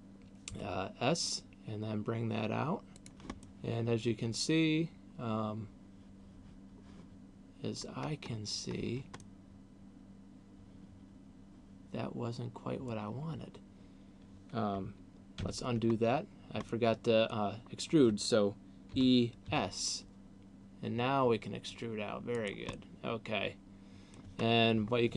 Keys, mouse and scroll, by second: 0.5 s, 3.3 click, 3.5 middle click, 8.3-9.0 scroll up 4, 9.0 middle click, 15.5 ctrl+z, 16.3-16.8 scroll down 2, 16.8 middle click, 18.8 e, 22.5 click, 22.8 middle click, 24.5 scroll down 1.